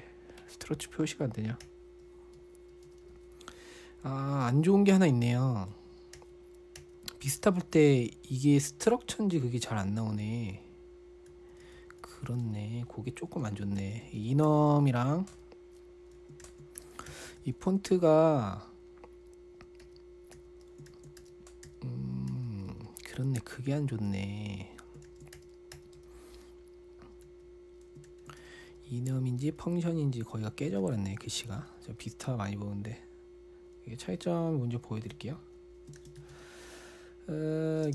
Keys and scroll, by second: 0.0-0.1 typing, 2.1-2.8 typing, 7.6-12.9 typing, 14.2 ctrl+l, 14.3-15.8 typing, 16.8 ctrl+l, 16.9-18.6 typing, 20.3-24.5 typing, 21.3 ctrl+l, 25.5 ctrl+l, 25.8-26.4 typing, 27.7 typing, 28.5 ctrl+l, 28.8-29.9 typing, 29.9 Return, 31.2 ctrl+l, 31.5-32.0 typing, 35.7-37.1 typing.